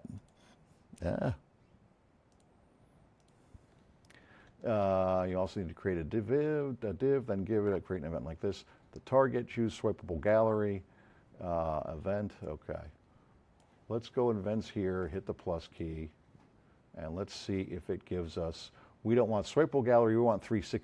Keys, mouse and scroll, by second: 0.2 click, 2.3 click, 3.2 click, 12.4-13.3 drag, 12.9 F7.